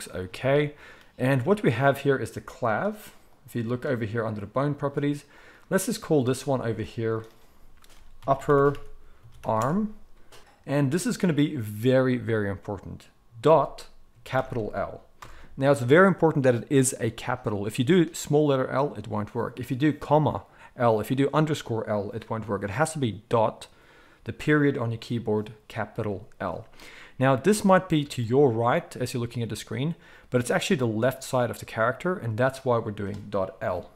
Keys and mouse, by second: 1.5-3.2 middle drag, 3.2 click, 3.4-5.3 middle drag, 5.3 click, 6.3 shift+middle click, 7.2-33.9 drag, 8.2 p, 33.6 KP_1.